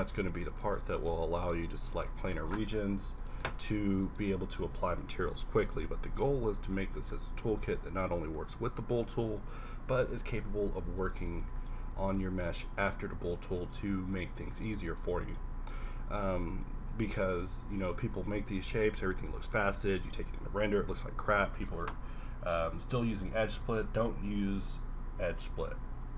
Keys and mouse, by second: 5.3 ctrl+l, 7.7 z, 8.1 a, 9.0 shift+z, 10.7 z, 10.8 z, 11.3 Tab, 11.9 a, 13.6 Tab, 22.5-26.1 drag.